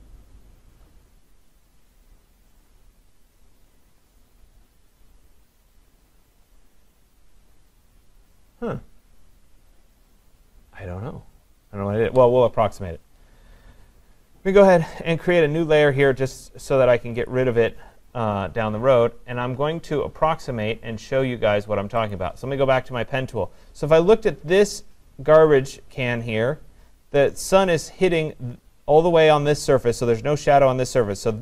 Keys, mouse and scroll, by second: 17.3 click, 22.1 click.